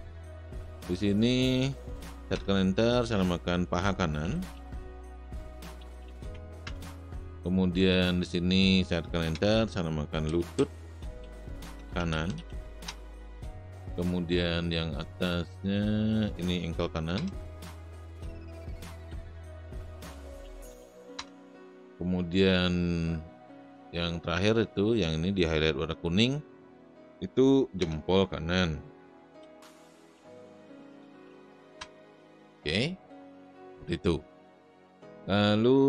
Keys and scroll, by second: 2.3 Return, 3.9-6.6 typing, 9.4 Return, 9.9-12.9 typing, 17.1 Return, 18.4-21.2 typing, 27.8 Return, 28.6-31.8 typing.